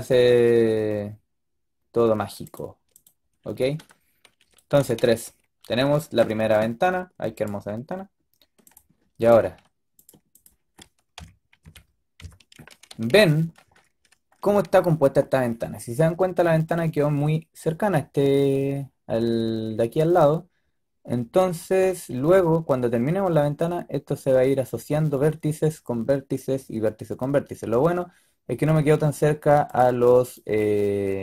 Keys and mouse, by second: 3.9-4.3 middle drag, 4.7 z, 7.2-8.0 drag, 9.1-11.0 drag, 9.1-11.0 right drag, 11.0 KP_3, 11.5 KP_5, 12.1 KP_5, 13.0 z, 30.5-31.1 drag, 31.1-31.2 middle drag.